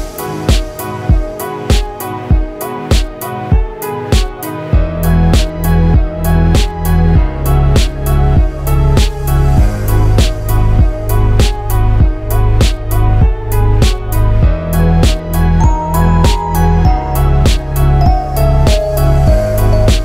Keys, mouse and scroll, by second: 0.5 click, 0.7-1.4 scroll up 4, 1.2 middle click, 2.4 Tab, 3.2 alt+click, 4.1 alt+shift+click, 4.5 shift+middle click, 4.9 middle click, 5.7 alt+shift+click, 6.1 middle click, 7.9 middle click, 8.8 alt+shift+click, 9.2 middle click, 9.7 shift+middle click, 10.0 middle click, 11.1 middle click, 11.9 shift+click, 12.7 middle click, 13.2 right click, 14.3 shift+middle click, 14.6 middle click, 14.7 a, 15.3 u, 16.5-16.8 scroll up 6, 17.8 scroll down 3, 18.0 shift+middle click, 19.8 Tab.